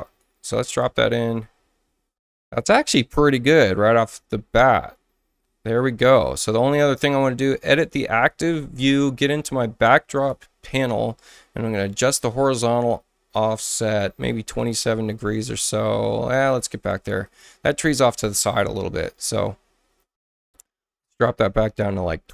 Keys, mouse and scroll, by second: 0.0 click, 7.8 click, 10.1 click, 11.8-14.0 drag, 14.6 click, 17.2 click, 21.6 click, 22.1-22.3 typing.